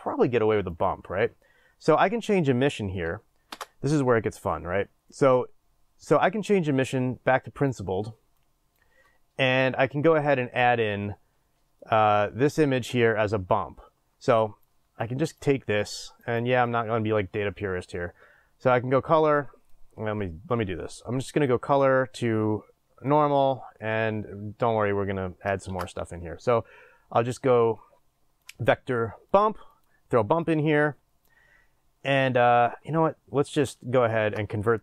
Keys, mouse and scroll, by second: 16.2 click, 19.7 click, 24.1-29.8 middle drag, 24.1 scroll up 2, 29.8 click, 30.4 click.